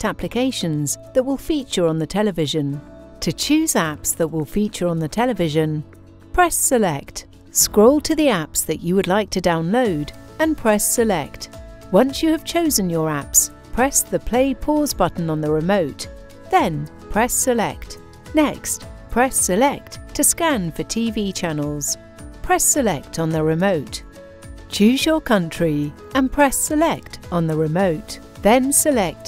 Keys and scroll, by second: 6.4 Return, 16.9 Return, 18.6 Return, 21.9 Return, 26.3 Return.